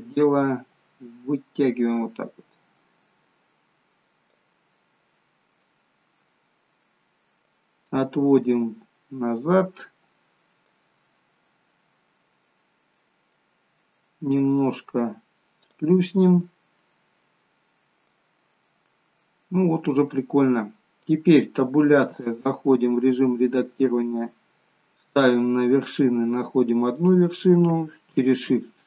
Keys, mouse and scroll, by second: 4.7 middle click, 5.8-6.9 scroll down 2, 6.1 middle click, 7.4 click, 11.0 middle click, 14.3 click, 16.4 click, 18.3 middle click, 20.3-21.4 scroll up 1, 22.0 Tab, 23.5 middle click, 23.5-24.8 scroll up 1, 25.4 click, 26.9 click.